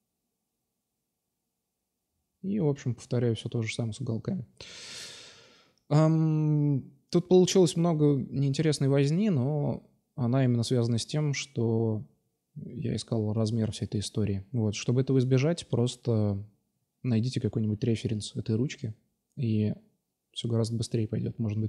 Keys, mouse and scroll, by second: 0.1 middle drag, 0.1-0.9 drag, 0.9 shift+d, 2.9 r, 4.9-6.0 drag, 6.2-6.7 right drag, 6.7 shift+d, 8.4 s, 9.8-10.3 drag, 10.3-10.9 right drag, 13.2-13.7 middle drag, 13.7-14.5 right drag, 14.7-15.8 middle drag, 16.5-16.9 middle drag, 16.9 right click, 17.2 Tab, 18.0 2, 18.1-19.1 right drag, 18.7 s, 21.4 Tab.